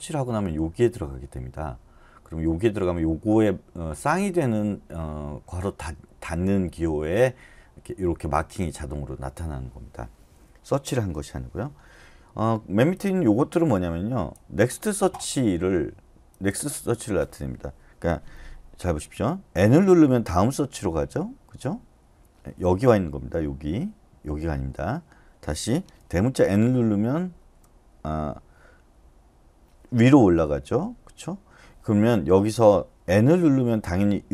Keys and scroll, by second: 19.6 typing, 26.6 typing.